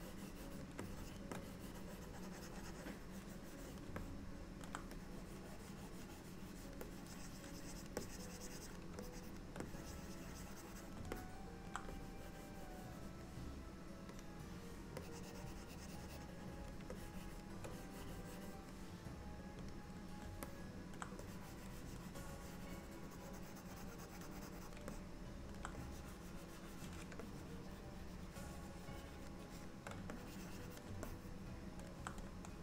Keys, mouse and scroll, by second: 0.9 shift+click, 1.4 click, 4.1 middle click, 5.0 click, 6.9 click, 8.1 click, 9.1 shift+click, 9.5 shift+click, 9.7 click, 11.2 middle click, 12.0 click, 14.5 click, 15.1 click, 17.0 shift+click, 17.6 shift+click, 17.8 click, 19.9 click, 20.5 middle click, 21.3 click, 25.0 middle click, 25.8 click, 27.3 shift+click, 29.6 shift+click, 30.2 click, 31.1 middle click.